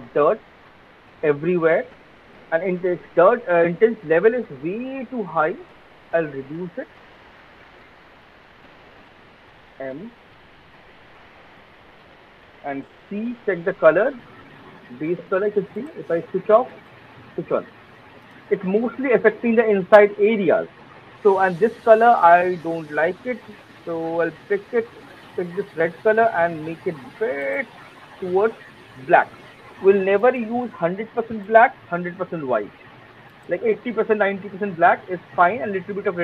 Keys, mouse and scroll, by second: 0.1 alt+middle click, 0.7 alt+click, 1.1 alt+middle click, 2.6 click, 7.1 click, 7.4 click, 8.6 alt+right click, 8.8 alt+middle click, 9.0 alt+click, 9.4 m, 10.2 alt+middle click, 10.7 alt+middle click, 11.9 alt+click, 13.0 c, 14.0 click, 14.8 click, 15.9 alt+right click, 16.6 click, 17.3 click, 17.6 click, 18.1 click, 21.5 click, 25.6 click, 29.0 click, 34.8 click, 35.0 alt+click, 35.5 alt+middle click.